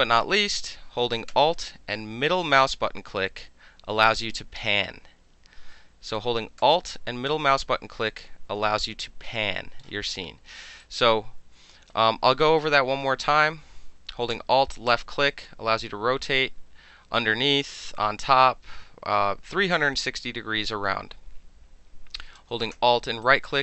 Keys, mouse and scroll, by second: 2.3 alt+click, 6.1-7.3 alt+drag, 7.9-10.8 alt+middle drag, 10.8-11.9 alt+right drag, 14.8-22.3 alt+drag, 23.2 alt+middle click, 23.5-23.6 alt+drag.